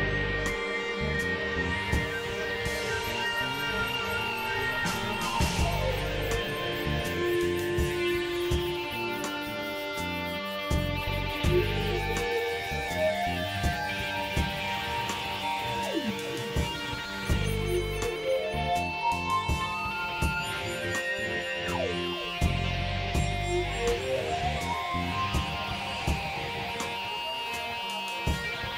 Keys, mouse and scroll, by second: 1.2 click, 1.9 KP_3, 2.1 middle click, 2.8 click, 3.7 click, 5.2 click, 5.8 click, 6.5 click, 7.2 click, 7.9-9.0 drag, 10.4 click, 11.0 middle click, 11.7 KP_1, 13.2-15.8 drag, 16.0 click, 16.6-17.6 drag, 18.1 click, 18.7 click, 19.3 click, 20.0 click, 20.6-21.7 drag, 22.3 click, 24.9-27.2 drag, 27.2 x, 27.8-28.7 drag.